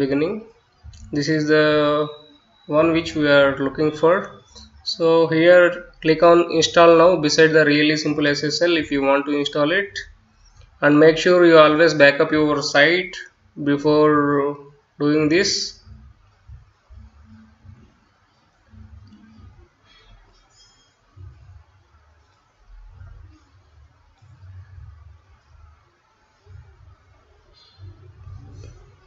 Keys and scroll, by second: 8.5-22.9 typing, 23.3 Return.